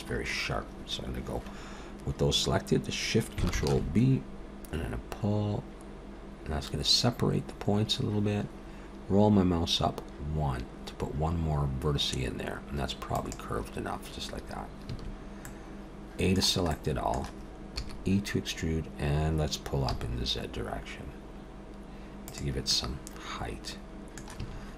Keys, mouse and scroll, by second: 3.5 ctrl+shift+b, 14.8 a, 15.4 middle click, 16.7 middle click, 17.8 e, 22.7 middle click, 24.4 a.